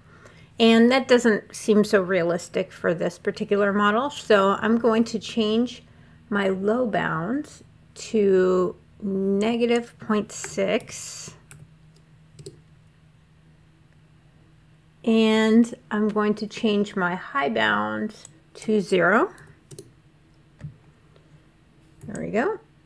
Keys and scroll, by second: 10.2 -, 10.5 ., 11.3 6, 12.2 Return, 19.2 0, 19.5 Return.